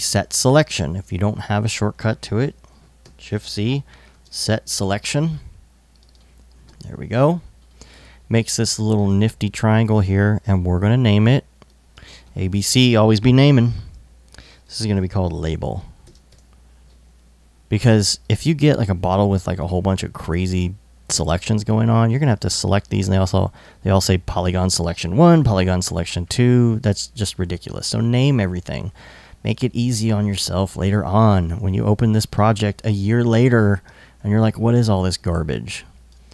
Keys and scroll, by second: 2.7-4.5 typing, 14.3-15.7 typing, 15.9 super+Tab, 16.9 Tab, 29.0 l, 30.2 super+s, 31.0 alt+super+s.